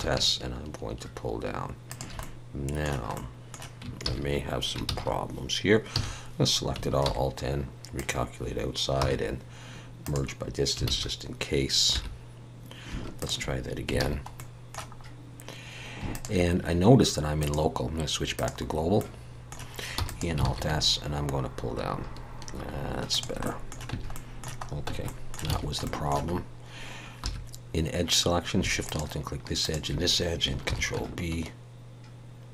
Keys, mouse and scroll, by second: 2.2 middle click, 4.1 ctrl+z, 5.9 a, 7.0 alt+n, 9.0 m, 10.9 alt+a, 11.9 3, 13.2 alt+shift+click, 14.0 alt+a, 14.3 middle click, 15.0-16.0 scroll up 1, 16.1 alt+shift+click, 17.4 click, 19.0 middle click, 20.0 e, 20.4 alt+s, 23.4 middle click, 23.9 Tab, 24.1 middle click, 24.9 Tab, 25.0 middle click, 25.5 alt+a, 25.8 shift+middle click, 27.2 2, 27.4-27.9 scroll up 2, 28.8 alt+shift+click, 30.7 ctrl+b.